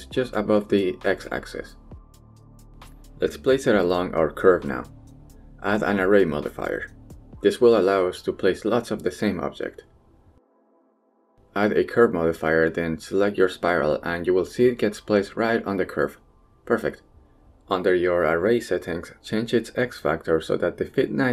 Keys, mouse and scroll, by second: 0.1 middle click, 0.8 shift+middle click, 1.2 middle click, 1.9 shift+middle click, 4.2 Tab, 5.4 click, 6.1 click, 7.6-8.7 drag, 9.9 middle drag, 10.6 middle click, 11.4 drag, 11.8-12.6 drag, 13.6 click, 14.9-15.2 middle drag, 16.2 middle click, 16.5 shift+middle click, 16.9 middle click, 19.5 click, 20.3-21.3 drag.